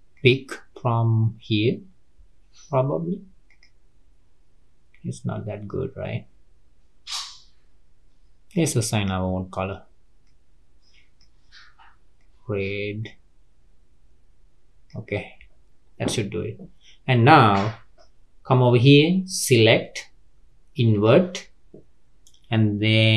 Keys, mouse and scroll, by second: 8.5 click, 19.8-22.8 drag.